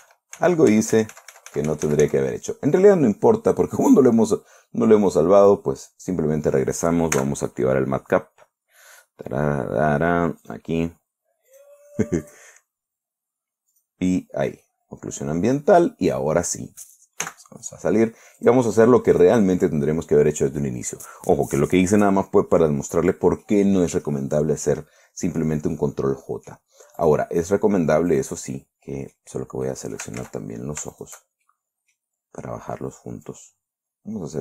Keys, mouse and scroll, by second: 0.0 ctrl+z, 4.1 click, 5.9 click, 7.6 n, 9.1 scroll down 2, 10.0 scroll down 2, 10.9 click, 11.9 click, 12.7 click, 13.1-13.7 scroll down 1, 14.2 click, 15.1 middle click, 15.9 scroll up 1, 17.7 n, 18.9 click, 19.6 click, 21.1-24.1 middle drag, 25.1-26.1 middle drag, 26.2-27.1 middle drag, 27.5 right click, 28.6 click, 29.3-29.8 middle drag, 29.9 scroll up 1, 30.1-30.6 middle drag, 30.7 ctrl+z, 31.4 shift+right click, 31.9 shift+right click, 32.6 scroll down 1, 33.7-34.4 drag.